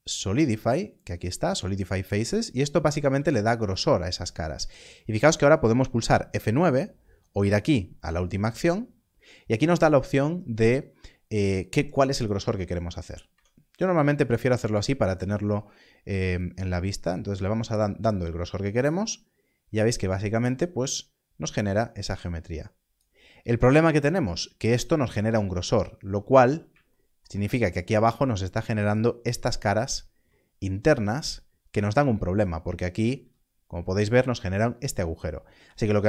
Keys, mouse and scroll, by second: 3.4 click, 7.6 click, 16.3 click, 26.0 click, 27.5 scroll up 1, 29.7 alt+click, 33.2 z.